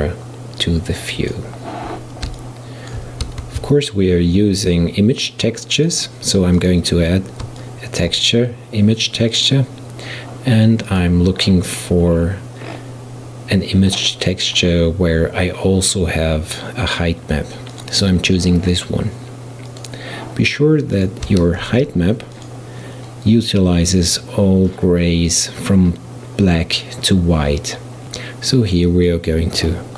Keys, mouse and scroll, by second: 2.4-3.5 shift+middle drag, 3.5 shift+a, 7.6-8.5 shift+middle drag, 8.5-9.4 scroll up 1, 9.4-14.0 drag, 21.0 click, 21.7 shift+d, 28.9-29.9 drag.